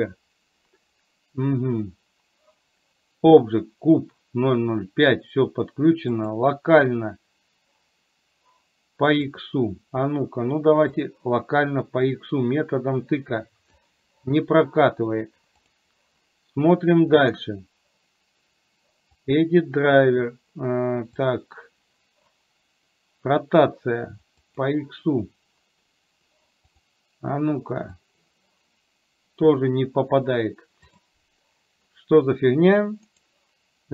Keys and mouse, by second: 11.1 click, 12.2-13.9 drag, 15.7 click, 28.3-29.7 drag.